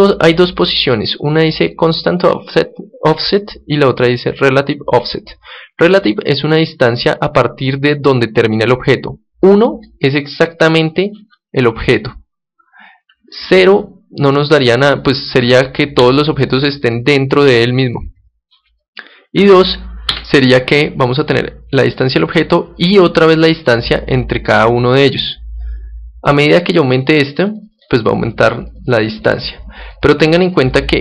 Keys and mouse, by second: 1.0-2.9 drag, 11.1 Tab, 14.3-31.0 drag.